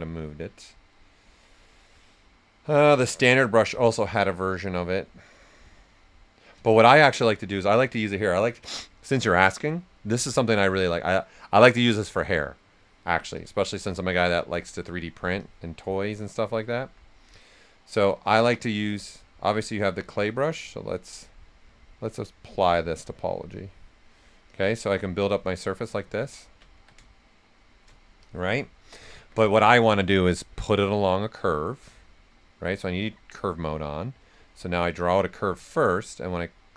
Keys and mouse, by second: 6.5 typing, 8.7 typing, 13.3 click, 13.3 typing, 14.0 right click, 14.5 click, 16.3 right click, 16.7 alt+right click, 17.9 click, 19.6 right click, 22.2 shift+click, 22.8 click, 24.0 right click, 24.5 click, 25.4 right click, 26.0 ctrl+z, 26.7 s, 26.8-28.2 drag, 28.2 click, 29.1 typing, 30.3 click, 32.5 click, 35.4 right click, 36.2-36.7 drag.